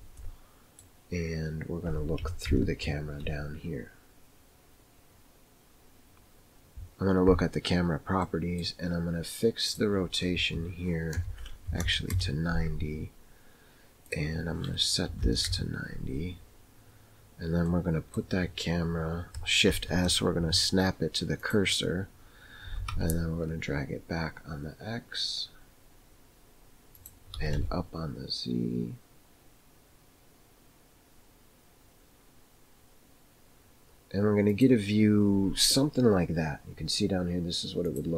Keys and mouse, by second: 0.3 middle click, 2.5 ctrl+KP_0, 8.2 middle click, 9.8-12.6 drag, 14.1-16.0 drag, 17.7-18.2 middle drag, 19.7 shift+s, 22.7 g, 27.4 g, 38.0 click.